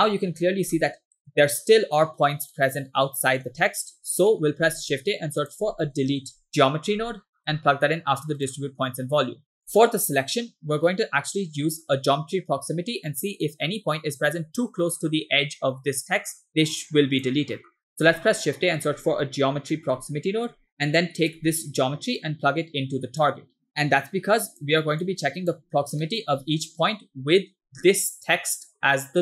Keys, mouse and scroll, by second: 0.4 scroll up 2, 0.7 shift+middle click, 1.5 scroll up 1, 2.6 middle click, 4.1 scroll down 2, 4.4 middle click, 4.7 shift+a, 9.6 click, 9.7 middle click, 10.0 scroll up 2, 10.9 scroll down 2, 10.9 middle click, 12.6 scroll down 3, 14.9 middle click, 16.8 click, 17.6 middle click, 17.9 scroll up 2, 18.1 shift+a, 22.2-23.7 drag, 23.7 click, 25.1 click, 26.1-26.5 middle drag, 27.8 middle click, 28.2 click.